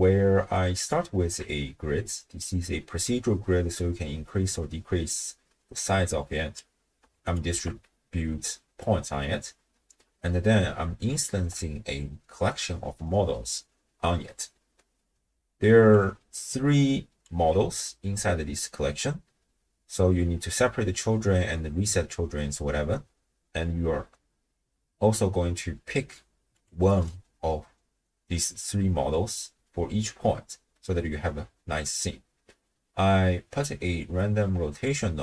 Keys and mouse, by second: 0.8 alt+shift+click, 2.4-6.6 drag, 7.2 alt+shift+click, 11.1 alt+shift+click, 15.7 d, 15.9-17.3 drag, 17.2 d, 17.3 d, 17.4 d, 26.6 click, 27.0 click, 34.0 click.